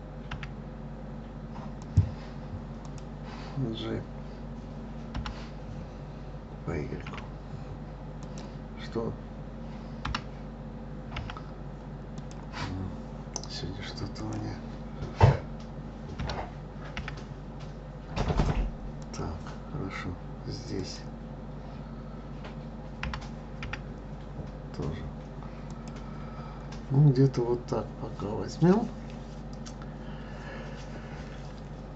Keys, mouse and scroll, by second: 0.3 y, 1.8 click, 2.8 click, 5.1 g, 10.0 g, 14.2 click, 16.2 g, 20.8 click, 23.0 g.